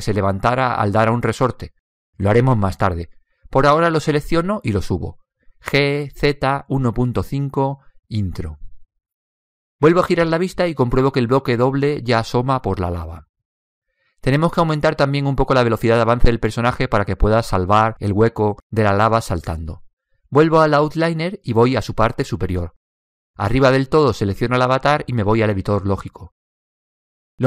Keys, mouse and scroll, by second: 0.8 right click, 4.3 right click, 6.0 g, 9.4-11.4 middle drag, 11.6-15.0 middle drag, 15.4-17.9 middle drag, 17.9 click, 25.4 click, 27.2 click.